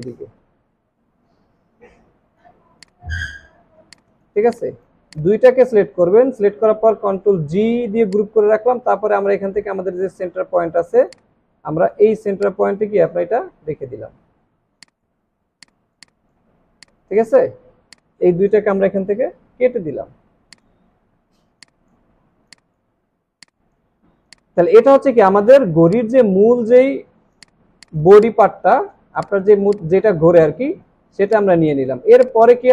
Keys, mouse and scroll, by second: 3.5 alt+scroll down 1, 3.9 space, 5.1 space, 7.1 ctrl+g, 10.1 alt+scroll up 1, 14.4 alt+scroll down 1, 14.7 alt+click, 15.8 space, 15.9 double click, 16.3 space, 16.5 alt+scroll down 3, 19.3 Delete, 20.9 alt+scroll up 1, 21.7 alt+scroll up 1, 22.2 alt+scroll down 2, 22.4 space, 23.1 alt+scroll down 1, 23.3 space, 27.4 space, 28.2 double click, 31.0 alt+scroll down 1, 31.3 space.